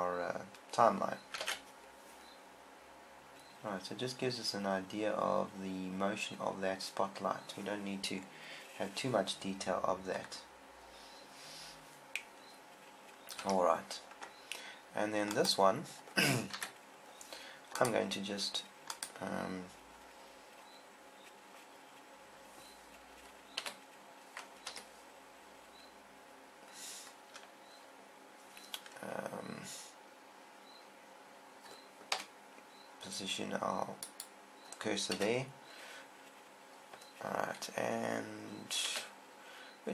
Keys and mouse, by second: 1.8 alt+a, 8.7 middle click, 13.8 Escape, 15.7-16.7 drag, 17.0 KP_1, 24.2 r, 32.6 KP_7, 34.6 click, 35.6 KP_1, 39.4 r.